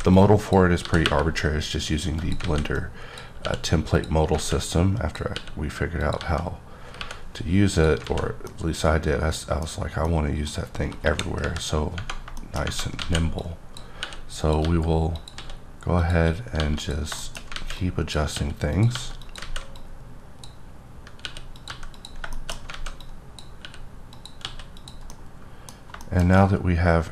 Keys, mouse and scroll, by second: 0.1 click, 0.8 g, 1.0 y, 2.2 click, 2.6 alt+a, 2.8 click, 4.5 alt+a, 4.7 click, 5.3 click, 6.2 g, 7.0 y, 7.7 click, 8.0 alt+a, 8.3 scroll down 1, 8.5 middle click, 11.0 KP_1, 11.4 KP_3, 12.4 shift+middle click, 13.0 alt+a, 13.4 click, 14.0 r, 14.4 click, 14.6 g, 15.1 click, 15.4 s, 16.0 click, 16.6 g, 16.8 click, 17.2 shift+middle click, 17.5 alt+a, 17.8 alt+click, 18.3 r, 18.7 click, 18.9 g, 19.2 click, 19.4 alt+a, 19.8 click, 21.2 r, 21.6 click, 21.7 g, 21.9 click, 22.3 shift+middle click, 22.7 alt+a, 23.0 click, 23.6 r, 24.1 click, 24.4 s, 24.7 click, 25.1 middle click.